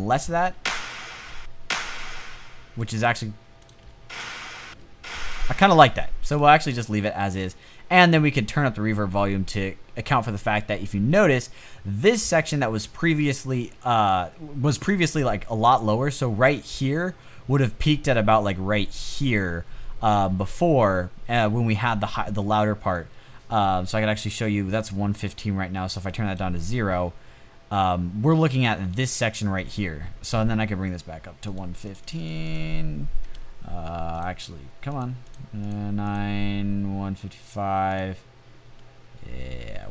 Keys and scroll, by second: 0.7 space, 1.5 space, 3.3 space, 4.0 space, 4.8 space, 7.6 space.